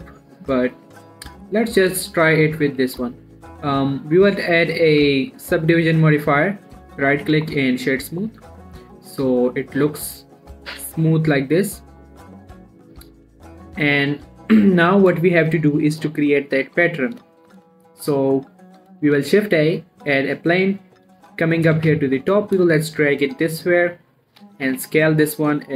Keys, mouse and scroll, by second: 3.2 Tab, 3.5 middle click, 4.6 click, 7.2 right click, 7.6 click, 7.9-12.5 middle drag, 12.5 scroll down 1, 12.9 Tab, 14.3 middle click, 19.4 shift+a, 20.4 click, 21.5 7, 21.9 scroll down 1, 22.2 g, 22.4 x, 23.0 shift+drag, 23.2 shift+middle click, 23.5-24.0 shift+scroll up 2, 24.7 s, 25.1 y.